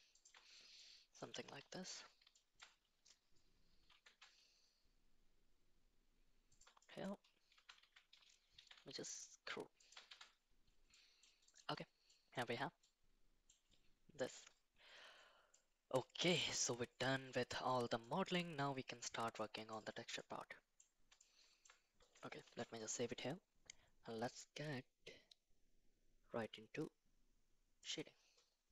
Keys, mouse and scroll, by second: 0.8 middle click, 1.8 shift+middle click, 2.3 shift+middle click, 3.7 g, 6.8 middle click, 7.5 Tab, 7.8 a, 8.6 e, 10.1 Tab, 10.9 middle click, 11.5 click, 12.1 middle click, 12.8 middle click, 15.5-16.3 middle drag, 18.1 shift+middle click, 19.3 middle click, 20.1 middle click, 21.2-21.6 shift+middle drag, 22.5 ctrl+s.